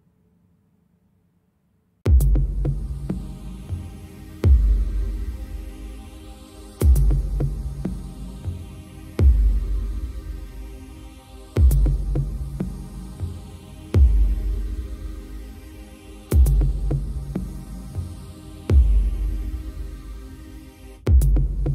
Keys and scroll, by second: 7.0 Tab, 13.6 ctrl+j, 14.8 Tab, 18.6 Tab.